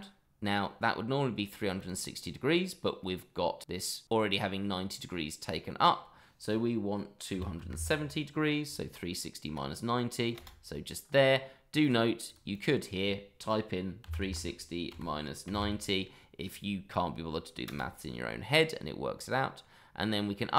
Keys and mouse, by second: 1.8-10.4 drag, 11.8 click, 12.5-17.7 drag.